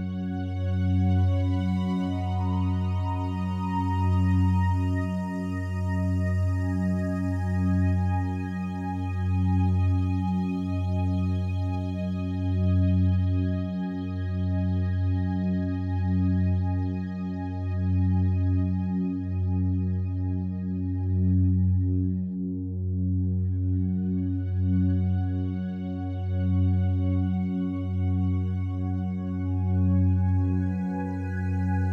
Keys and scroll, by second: 3.5 Return, 19.4 BackSpace, 20.0 6, 20.3 Return, 28.1 F9.